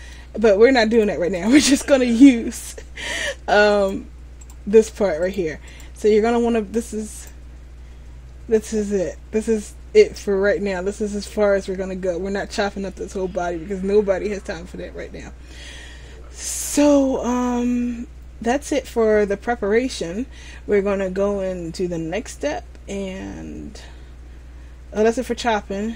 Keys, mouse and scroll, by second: 1.1 click, 1.1 scroll up 1, 3.3 right click, 4.6 right click, 11.1-14.3 scroll down 1, 23.9 middle click.